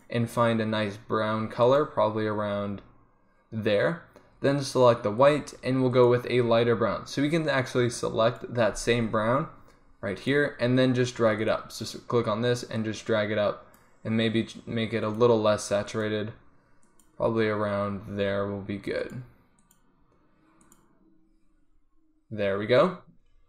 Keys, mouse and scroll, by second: 5.3 click, 6.1-8.1 middle drag, 11.7-13.1 drag, 13.1 middle click.